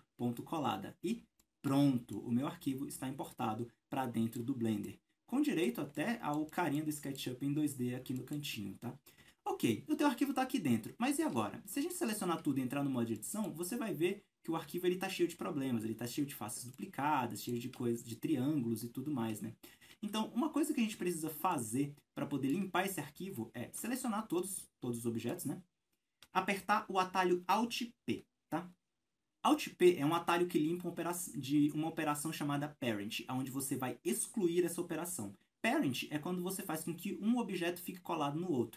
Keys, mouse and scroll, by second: 0.0 click, 0.8 scroll down 1, 1.4-4.6 shift+middle drag, 1.7-2.1 scroll up 1, 4.6 scroll up 1, 4.8-6.7 middle drag, 7.8 scroll down 1, 8.2 middle click, 9.2 alt+a, 11.0 scroll up 1, 11.4 a, 11.6-18.4 middle drag, 11.6 scroll down 1, 12.2-12.7 scroll up 1, 12.8 Tab, 13.5-14.1 scroll up 1, 14.7 scroll up 1, 15.5-16.8 scroll up 2, 18.4-19.3 scroll down 1, 19.5-23.2 middle drag, 19.5 a, 19.7-20.0 scroll down 1, 20.0 Tab, 20.3 scroll up 1, 20.9 alt+a, 21.2 scroll down 1, 22.6 Tab, 23.2 scroll down 1, 23.4-38.7 middle drag.